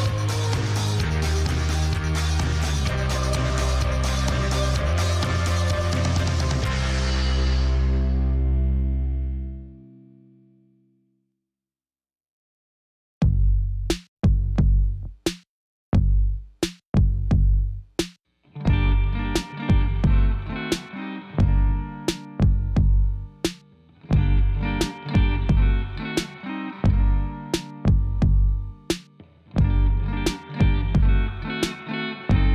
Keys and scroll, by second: 10.4 3, 12.5 Tab, 13.7 shift+z, 14.5 1, 17.4 g, 17.7 z, 19.3 shift+z, 21.4 Tab.